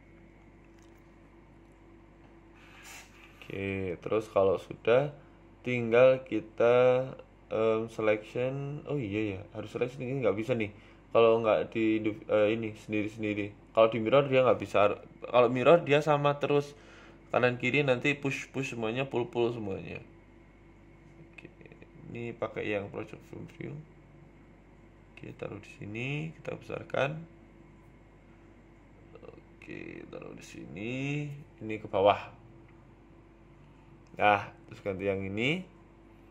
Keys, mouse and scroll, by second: 0.0 ctrl+s, 4.2 click, 5.4 p, 6.3 Tab, 6.6 right click, 7.6 click, 8.1 click, 8.4 Tab, 8.8 right click, 9.8 click, 10.4 click, 11.1 click, 12.1 click, 12.9 Tab, 13.5 click, 13.8 click, 14.4 Tab, 14.6-15.8 scroll up 3, 16.8 click.